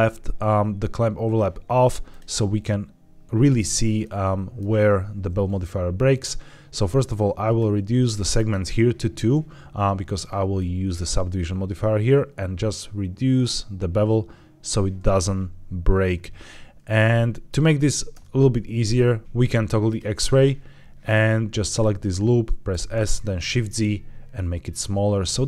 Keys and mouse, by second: 2.0 click, 3.9-4.4 middle drag, 7.5 click, 8.3 click, 10.4-14.5 shift+drag, 16.9 middle click, 18.0 Tab, 19.8 click, 21.5 alt+click, 22.9 shift+s, 23.3 shift+z, 25.1 click.